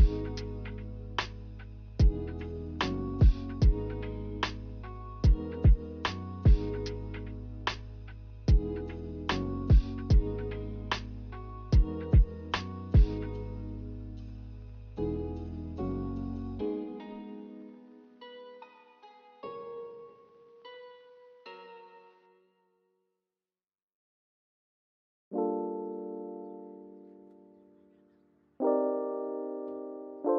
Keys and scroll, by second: 9.0 a, 14.2 ctrl+c, 14.4 ctrl+v, 26.5 ctrl+z, 27.0 ctrl+z, 27.6 ctrl+z.